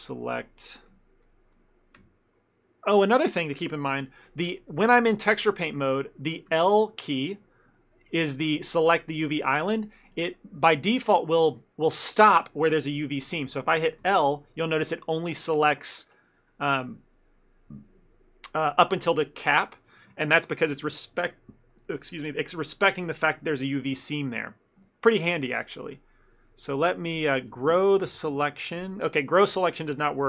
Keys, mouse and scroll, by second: 1.0 l, 1.3 middle click, 2.1 l, 4.8 middle click, 6.6 l, 10.7 a, 14.1 l, 15.3 middle click, 20.3 ctrl+middle click, 24.0 shift+middle click, 24.9 l, 25.5 middle click.